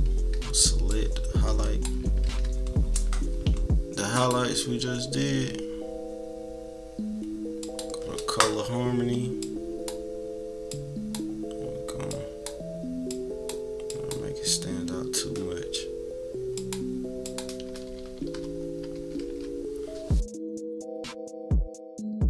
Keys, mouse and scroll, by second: 2.0 ctrl+=, 2.2 ctrl+=, 4.1 click, 7.6 click, 9.4 click, 10.7 click, 12.1 click, 16.5 click, 17.2 click, 17.7 -, 17.9 -, 18.5-19.3 scroll up 3, 18.9 =, 19.3 =, 19.8 scroll down 1, 20.3-20.6 scroll down 2, 20.4 =, 20.7 =, 21.1 click, 21.3 click, 21.9 click.